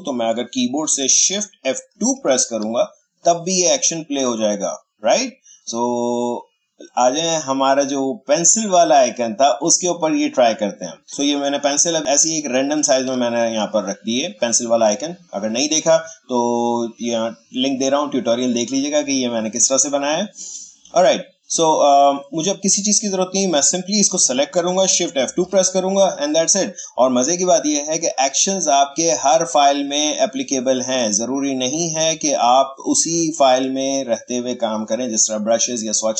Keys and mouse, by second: 0.9 ctrl+shift+z, 2.0 shift+F2, 6.9-13.7 drag, 13.7-16.7 drag, 20.7-22.3 drag, 25.4 shift+F2, 27.9-33.1 drag.